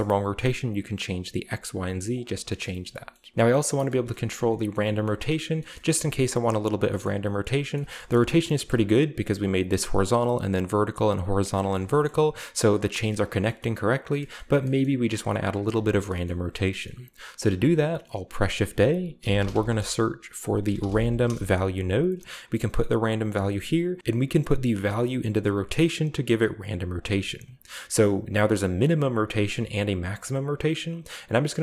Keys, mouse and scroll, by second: 1.1 click, 1.5 drag, 1.8 drag, 2.2 click, 2.3-2.9 scroll down 1, 2.5 shift+middle click, 2.9-3.3 shift+scroll up 1, 3.4 shift+middle click, 3.8 shift+middle click, 4.7 middle drag, 5.0 shift+middle drag, 5.2-5.7 scroll down 2, 5.6 shift+middle click, 5.8 shift+middle drag, 5.8-6.7 shift+scroll up 2, 6.2 middle drag, 6.9 shift+middle click, 7.2-7.7 middle drag, 7.9 shift+middle drag, 8.2 shift+middle click, 8.2-9.1 scroll up 3, 8.9-9.6 shift+middle drag, 9.7 right click, 10.5 right click, 11.0 right click, 11.8 shift+middle click, 12.3-13.1 shift+scroll up 1, 13.1-13.9 scroll down 1, 13.3-14.1 shift+middle drag, 13.9-14.8 shift+scroll up 1, 14.8-15.4 middle drag, 15.7 shift+right click, 16.0 shift+middle click, 16.7-17.5 scroll up 2, 16.8 middle click, 17.3 shift+a, 19.1 typing, 20.6 typing, 21.2 Return, 23.0-23.3 drag, 23.2-23.8 scroll up 1, 24.4-26.4 drag, 26.9 click, 27.4-28.3 scroll up 2, 28.3 click, 29.0 right click, 29.4 click, 30.1 right click.